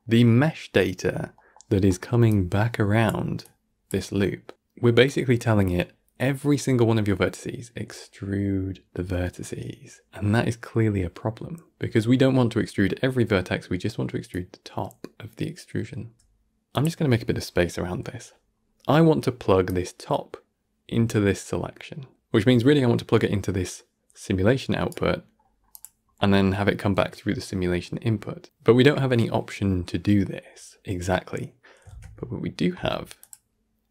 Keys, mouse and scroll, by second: 0.0-2.1 middle drag, 2.1-3.3 d, 4.8 scroll up 1, 5.3-14.2 middle drag, 14.2-18.3 drag, 18.3 scroll up 1, 18.7 middle click, 19.5-25.9 drag, 25.9 scroll down 1, 26.1-31.8 middle drag, 31.8 shift+a.